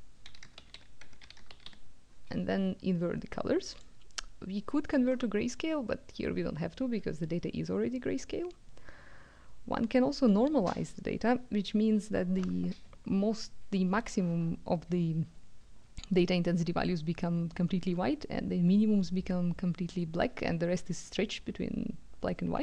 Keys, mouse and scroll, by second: 0.1-1.5 typing, 0.9 Tab, 3.7 click.